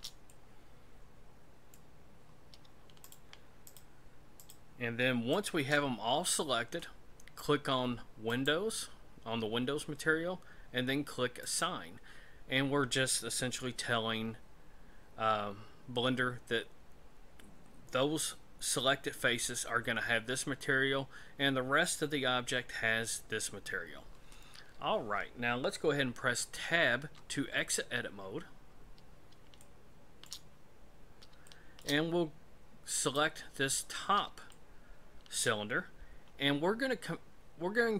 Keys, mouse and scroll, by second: 0.3 middle click, 2.0-2.6 scroll up 1, 3.0 shift+right click, 5.3 shift+right click, 8.3 click, 27.0 Tab, 28.2 scroll down 2, 28.8-29.3 scroll down 3, 29.6 shift+middle click, 30.6 scroll down 2, 31.4 shift+middle click, 33.0 right click, 33.8-34.2 scroll up 4, 35.4 shift+middle click, 35.8-36.1 scroll up 2.